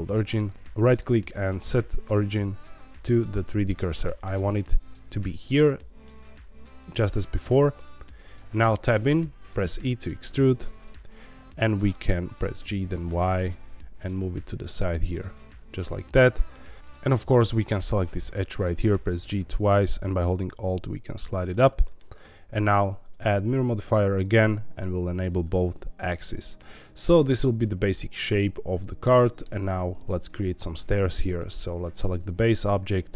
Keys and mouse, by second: 4.0 middle click, 5.4 middle click, 7.8 middle click, 8.6 Tab, 9.6 e, 10.7 click, 11.0 middle click, 12.5 g, 12.8 y, 14.8 click, 15.1-16.5 middle drag, 16.8 ctrl+z, 19.0 g, 19.2 g, 21.3 alt+click, 21.8 middle click, 22.2 Tab, 23.0 click, 24.1 middle click, 25.2 click, 26.9 middle click, 27.8-29.4 shift+middle drag, 31.3 click, 32.6 Tab.